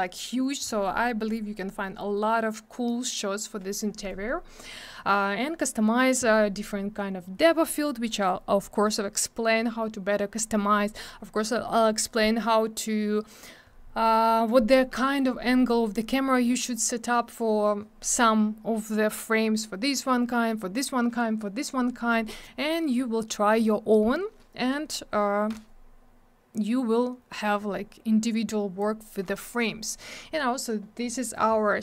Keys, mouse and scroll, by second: 4.3 scroll down 1, 29.7 scroll down 1.